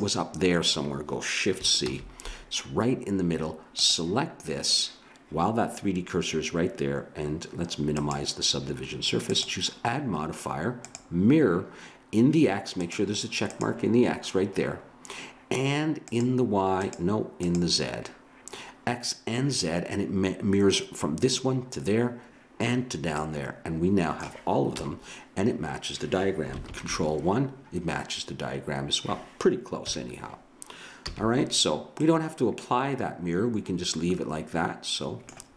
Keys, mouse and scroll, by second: 1.8 shift+c, 3.8-6.5 drag, 7.9-11.9 drag, 12.8-19.4 drag, 23.2-24.9 middle drag, 24.8 KP_1, 26.7 ctrl+KP_1, 29.9 KP_1, 31.1 a, 32.0-33.8 middle drag.